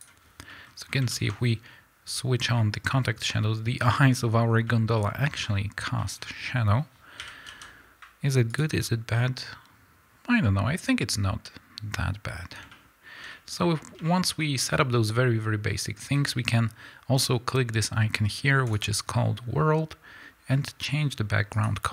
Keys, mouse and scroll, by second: 0.4-8.5 middle drag, 0.8 scroll up 2, 2.8-3.3 scroll up 2, 3.3-4.6 scroll down 2, 4.9-5.9 scroll down 2, 6.1-7.1 scroll up 2, 7.1 r, 8.5 click, 8.7-9.1 scroll up 2, 9.1-18.6 middle drag, 18.6 click, 21.4 click.